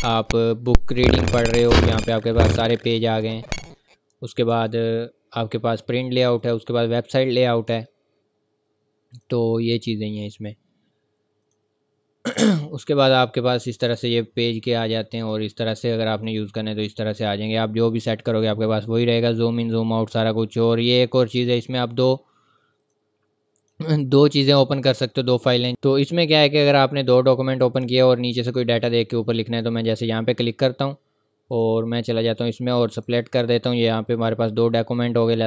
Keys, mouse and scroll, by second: 0.6 click, 1.3 click, 1.9-2.8 scroll down 1, 2.8-3.1 scroll up 1, 4.5 Escape, 6.3 click, 6.9-7.3 scroll up 1, 7.7 Escape, 9.1 click, 12.4 scroll down 1, 13.0 scroll up 1, 13.5 scroll down 1, 14.3 scroll up 1, 15.0 click, 16.0 scroll down 1, 16.5-16.9 scroll up 1, 16.9-17.5 scroll down 1, 17.5 scroll up 1, 21.3 click, 24.4-25.7 scroll down 1, 26.6 scroll up 1, 27.4 scroll down 1, 28.1 click, 33.8-34.5 scroll up 1, 35.1-35.4 scroll down 1.